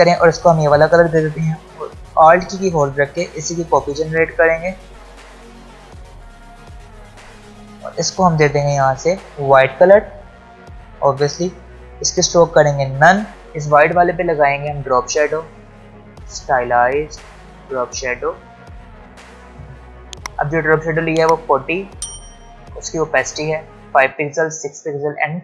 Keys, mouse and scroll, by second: 0.4 click, 1.7 v, 3.8 alt+click, 5.0 alt+scroll down 1, 5.2 click, 6.3 alt+scroll up 1, 6.7 click, 11.3 click, 20.3 ctrl+Num_Lock, 20.3 click, 20.6 ctrl+alt+scroll up 2.